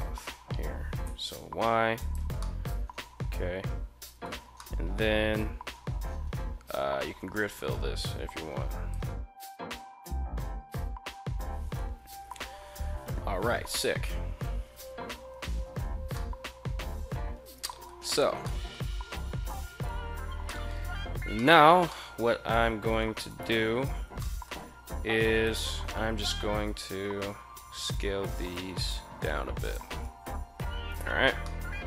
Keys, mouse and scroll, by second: 0.4 y, 1.5 click, 2.0-3.8 middle drag, 4.2-6.3 middle drag, 7.1 ctrl+f, 8.6 click, 11.3 KP_1, 13.4 KP_1, 14.9 z, 15.7 middle click, 17.1 middle click, 17.5 a, 17.7 a, 17.9 middle click, 20.0 shift+middle click, 20.9 shift+middle click, 21.4 middle click, 22.8 alt+right click, 23.7 middle click, 24.8 shift+right click, 25.9 s, 26.2 z, 29.2 click, 30.4 Tab, 31.0-31.8 middle drag.